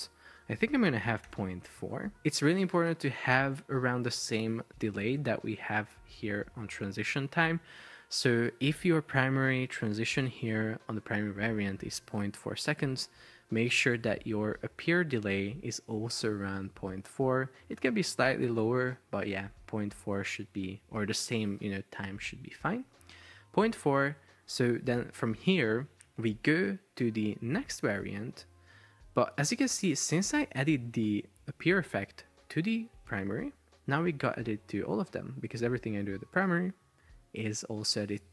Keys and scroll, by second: 0.8-2.2 typing.